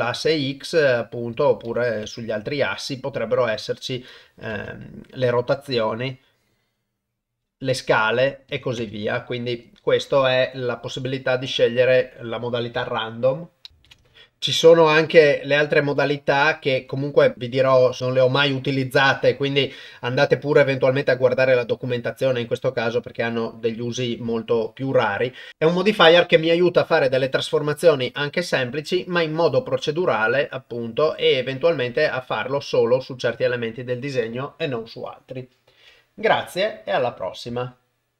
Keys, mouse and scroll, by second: 0.1 click, 1.8 click, 3.2 click, 4.0 click, 5.2-7.9 drag, 8.5 click, 14.8-16.7 drag, 32.5 click.